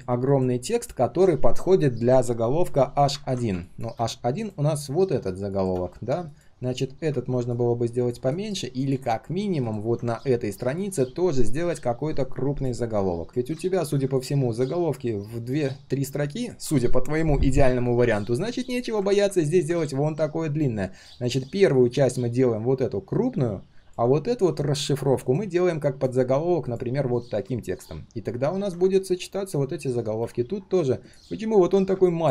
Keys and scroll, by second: 13.3 ctrl+z.